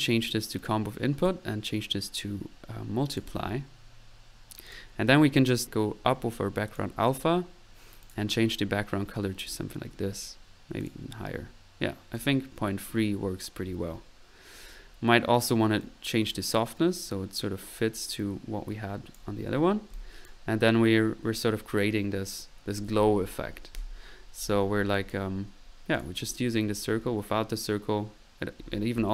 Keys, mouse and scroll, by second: 0.6 drag, 1.2-1.6 drag, 3.1 click, 6.8 drag, 8.0 click, 9.4 click, 10.8 click, 19.1 click, 19.6 click, 19.9 click, 24.9-25.3 drag, 25.6 click, 25.9 click, 26.2 click, 29.0 click.